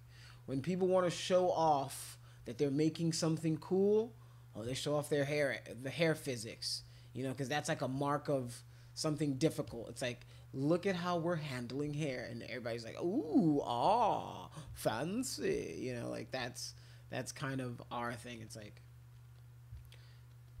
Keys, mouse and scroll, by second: 0.6 alt+click, 1.7 click, 3.3-4.3 drag, 5.0-6.2 drag, 6.5 click, 7.5 click, 9.6 alt+click, 10.7-11.7 drag, 12.1-13.3 drag, 14.0 click, 14.8 alt+click, 15.6 alt+click, 16.5 click, 16.8 click, 17.2 click, 17.4 click, 17.7 click, 18.0 click, 18.2 click, 18.4 click, 18.9 click, 19.1 click, 19.3 click, 19.7 click, 20.0 click, 20.3 click, 20.5 click.